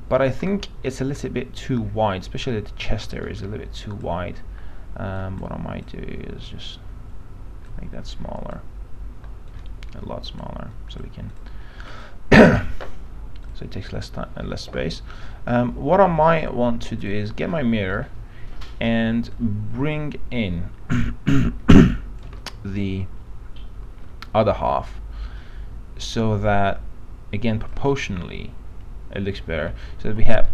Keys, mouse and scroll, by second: 0.2-0.6 scroll up 1, 3.3-11.0 drag, 18.1 alt+middle click, 19.5-22.4 drag, 22.6 alt+middle click, 24.8-28.0 drag, 28.4-29.8 alt+middle drag, 30.2 ctrl+z.